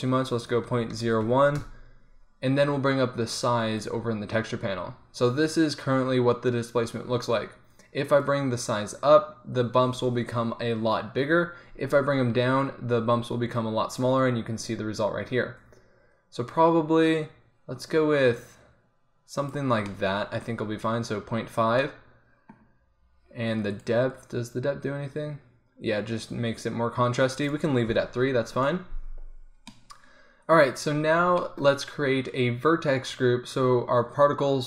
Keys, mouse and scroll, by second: 3.5 middle click, 14.2-15.6 middle drag, 17.5-22.3 middle drag, 22.3 click, 23.8-26.0 drag, 26.0-30.2 middle drag.